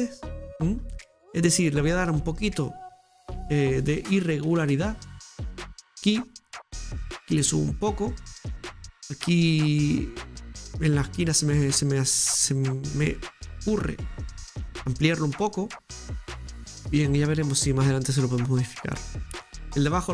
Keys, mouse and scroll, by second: 0.5 scroll up 4, 1.7 right click, 2.0-3.8 shift+middle drag, 3.8 shift+right click, 4.9-6.8 drag, 6.8 right click, 7.7-10.5 drag, 10.9-12.1 middle drag, 12.3 right click, 12.8 right click, 13.6 shift+right click, 13.7 shift+right click, 14.7 shift+right click, 14.9-16.7 drag, 16.7 middle click.